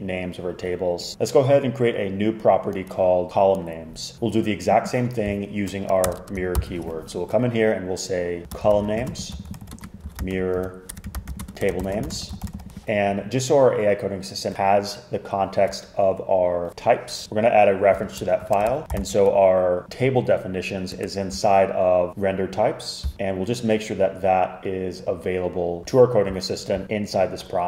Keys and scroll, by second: 3.9-4.6 typing, 6.1 Return, 6.2 Return, 6.6 super+k, 8.4-13.1 typing, 17.0-19.6 typing, 20.8-21.5 typing, 23.7 typing.